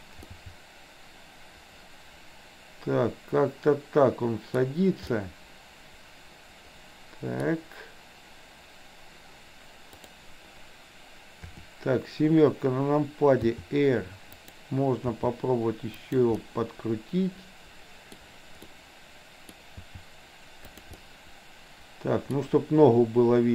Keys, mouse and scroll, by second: 0.3-4.5 middle drag, 5.0 scroll up 1, 5.2-7.5 middle drag, 9.9 click, 11.4 KP_7, 13.5 r, 15.0 g, 16.4-18.2 middle drag, 18.7 scroll up 1, 18.8-19.4 middle drag, 19.4 scroll down 1, 19.7 g, 20.9-22.3 middle drag, 22.3 scroll down 1.